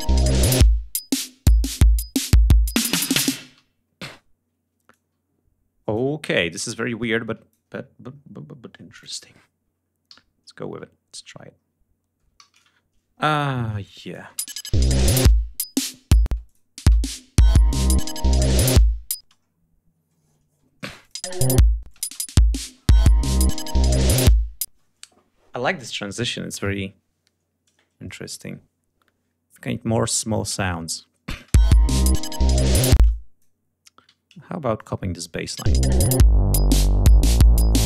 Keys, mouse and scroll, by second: 3.4 g, 3.9 space, 4.2 ctrl+scroll down 2, 4.8-6.0 ctrl+drag, 6.1 scroll down 2, 7.0-7.6 ctrl+drag, 7.8-8.2 ctrl+scroll up 3, 8.8 ctrl+click, 10.0 alt+d, 11.5-11.9 scroll down 5, 12.3 ctrl+alt+d, 13.9 click, 14.2 space, 15.7 scroll down 2, 16.1 space, 16.3 click, 17.0-17.7 scroll down 3, 19.1 space, 19.3-19.6 scroll down 1, 20.3 ctrl+scroll up 1, 20.9 ctrl+click, 21.1 ctrl+space, 21.8 space, 21.8 click, 24.5 space, 29.4 click, 29.7 scroll down 2, 30.6 scroll up 2, 31.2 click, 31.3 space, 31.4 scroll up 3, 31.5-32.5 ctrl+scroll down 6, 32.9 space, 33.0-33.5 drag, 34.0 alt+d, 34.7 click, 35.5 space, 35.7 d, 35.8 click, 36.5-37.8 drag.